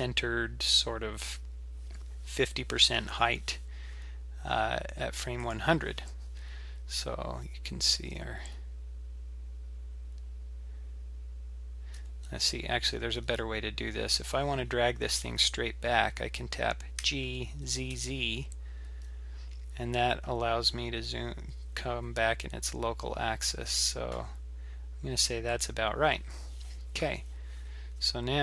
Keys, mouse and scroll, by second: 5.4 click, 7.2-8.0 scroll down 4, 8.0 g, 14.3-15.4 scroll up 4, 15.4-16.1 scroll down 3, 16.1-17.0 scroll up 1, 17.0 g.